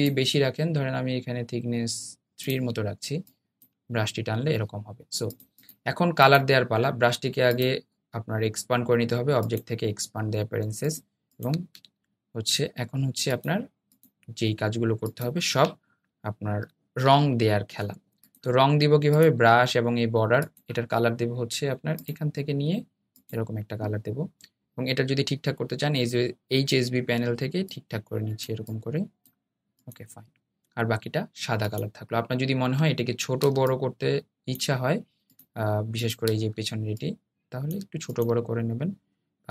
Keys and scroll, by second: 16.7 super+}.